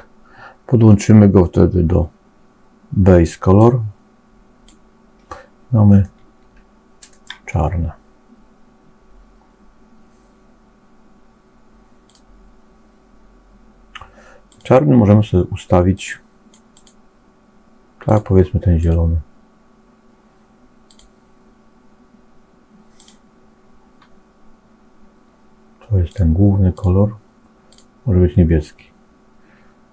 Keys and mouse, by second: 3.5-4.7 drag, 6.0-7.2 middle drag, 22.8 click, 26.0 click.